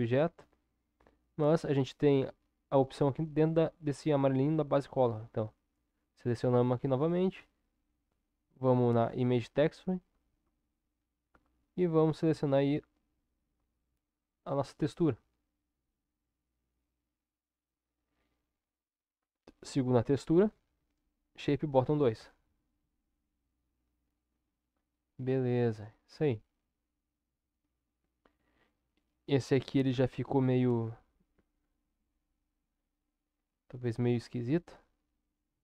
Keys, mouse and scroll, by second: 35.4 Tab.